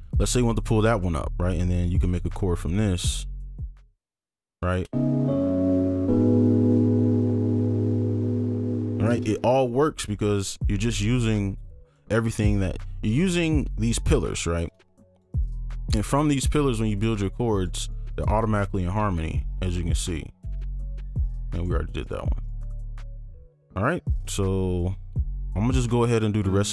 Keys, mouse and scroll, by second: 1.0-1.6 scroll up 1, 1.6 ctrl+click, 2.1 shift+click, 3.0 shift+click, 4.1 right click, 9.1 space, 11.1 right click, 12.1-12.9 scroll down 1, 13.2 ctrl+click, 14.7 shift+click, 15.9 ctrl+click, 17.2 shift+click, 18.0 right click, 18.1 ctrl+click, 19.1 shift+click, 20.4 ctrl+click, 23.1 right click.